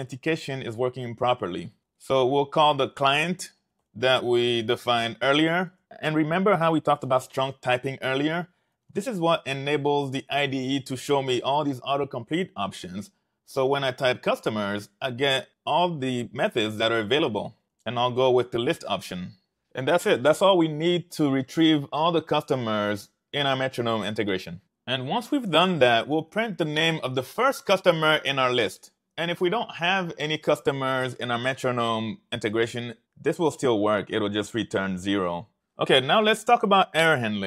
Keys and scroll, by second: 1.7-4.2 typing, 5.3-6.3 typing, 8.3-10.4 typing, 13.5 ., 17.5-19.3 typing, 26.2 Return, 26.4 Return, 26.6 super+v.